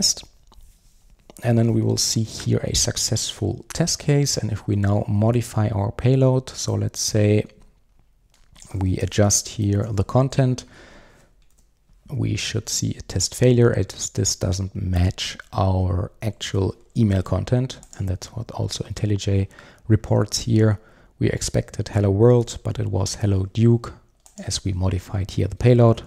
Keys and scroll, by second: 10.4 super+s, 11.5 super+r.